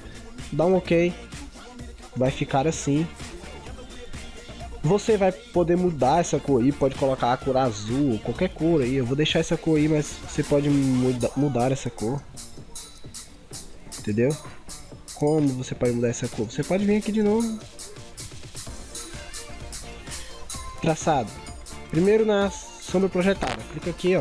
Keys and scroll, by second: 3.3 ctrl+=, 3.7 ctrl+0, 4.2 ctrl+=, 4.7 ctrl+0, 13.0 ctrl+z.